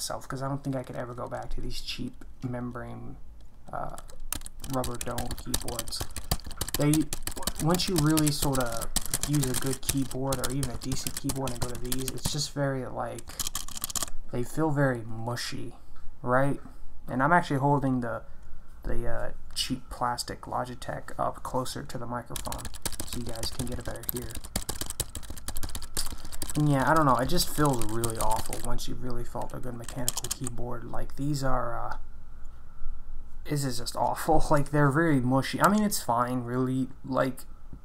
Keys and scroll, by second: 4.1-12.2 typing, 13.4 ctrl+BackSpace, 13.6 ctrl+BackSpace, 13.6-14.5 typing, 22.1-28.9 typing, 30.1 ctrl+BackSpace, 30.3 ctrl+BackSpace.